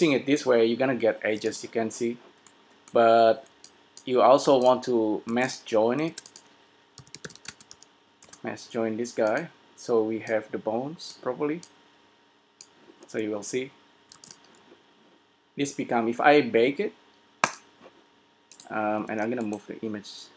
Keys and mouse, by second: 0.8 click, 1.5 s, 3.8-6.8 drag, 5.4 s, 6.2 shift+a, 17.0 s, 19.1 g.